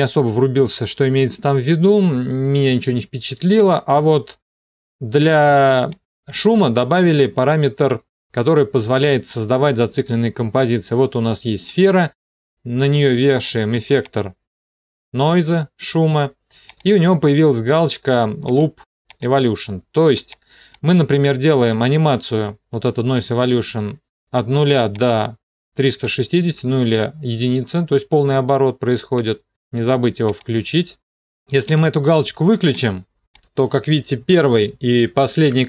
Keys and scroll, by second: 35.0 End.